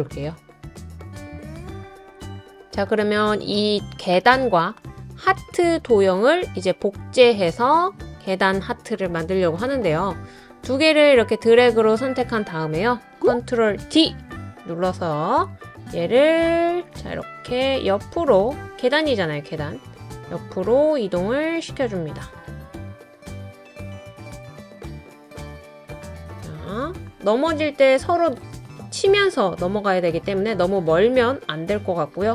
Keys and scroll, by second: 13.8 super+d.